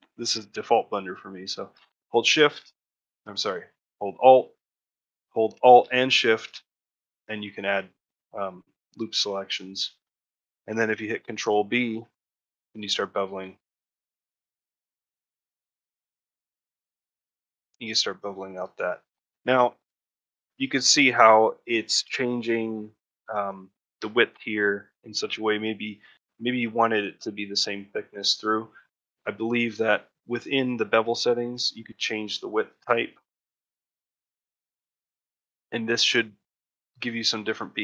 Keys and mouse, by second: 0.5 middle click, 0.8 shift+middle click, 2.1 shift+click, 2.8 shift+click, 3.3 click, 4.6 shift+middle click, 5.0 middle click, 7.0 middle click, 7.4 shift+middle click, 7.8 middle click, 8.8 shift+middle click, 9.9 shift+middle click, 17.0 middle click, 17.3 shift+middle click, 17.6 middle click, 18.2 middle click, 18.7 alt+middle click, 20.0 ctrl+middle click, 20.3 shift+middle click, 25.1 shift+middle click, 27.9 shift+middle click, 28.9 click, 32.7-34.0 drag, 36.9-37.8 drag.